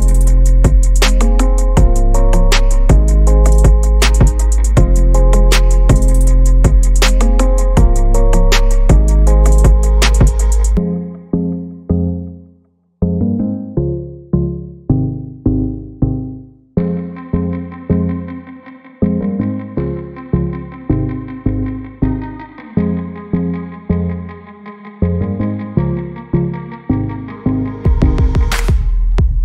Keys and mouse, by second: 1.3 Tab, 1.6 Tab, 1.9 alt+s, 3.0 g, 3.4 alt+s, 3.9 click, 4.0-10.4 typing, 4.4 alt+s, 4.7 alt+s, 5.5 alt+s, 5.8 shift+click, 6.0 alt+s, 6.5 alt+s, 7.4 alt+s, 8.3 alt+s, 8.6 shift+click, 9.0 alt+s, 9.2 click, 9.4 alt+e, 9.5 ctrl+z, 9.7 alt+s, 10.4 alt+s, 10.6 middle click, 10.7 Tab, 10.7 middle click, 11.5 e, 11.7 click, 11.9 click, 12.5 f, 12.7 ctrl+z, 12.9 e, 13.0 s, 13.5 ctrl+r, 14.4 f, 14.5 Tab, 14.7 middle click, 15.4 drag, 15.5 shift+middle click, 15.6 click, 15.7 click, 16.8 click, 16.9 Tab, 17.0 click, 17.3 shift+click, 17.6 Tab, 17.9 middle click, 18.6 shift+d, 19.2 ctrl+z, 19.7 ctrl+z, 19.9 click, 20.5 F3, 21.2 click, 22.0 click, 22.4 middle click, 22.8 middle click, 23.1 shift+middle click, 23.7 F3, 25.7 F3, 26.7 F3, 27.3 click, 27.4 Tab, 27.7 middle click, 28.0 shift+middle click, 28.3 shift+middle click, 28.4 Tab, 28.8 Tab, 28.9 Tab.